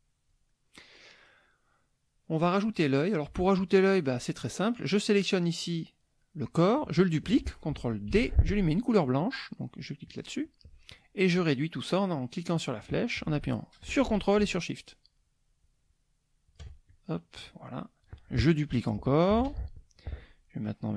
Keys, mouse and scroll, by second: 0.5 middle click, 1.2 middle click, 1.9 middle click, 2.9 middle click, 4.3 click, 8.1 ctrl+d, 10.1 click, 12.5-16.8 drag, 16.9-18.2 ctrl+shift+drag, 19.3 ctrl+d.